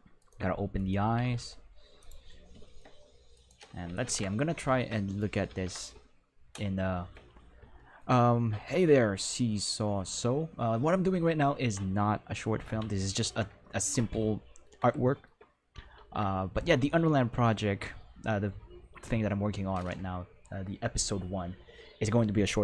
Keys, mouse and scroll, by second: 0.1 right click, 0.7 right click, 1.2 x, 1.3 x, 2.0 click, 3.3 right click, 4.0 ctrl+s, 5.5 ctrl+s, 15.9 ctrl+s.